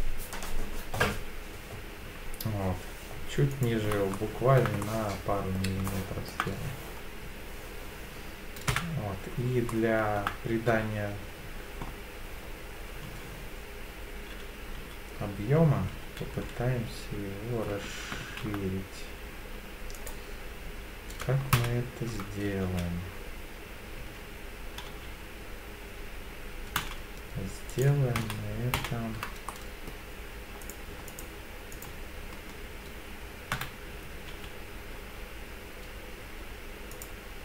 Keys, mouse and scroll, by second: 3.5 click, 4.1 shift+middle click, 4.8 middle click, 5.9 shift+middle click, 8.7 KP_1, 9.7 shift+middle click, 13.0 s, 14.8 z, 16.3 x, 18.2 shift+z, 20.0 right click, 21.5 ctrl+z, 22.6 e, 24.0 s, 24.9 z, 26.8 z, 27.7 right click, 28.2 ctrl+z, 28.8 ctrl+z, 29.5 middle click, 30.6 click, 31.1 alt+click, 31.7 alt+click, 33.5 KP_1, 34.3 e, 35.0 z, 36.9 click.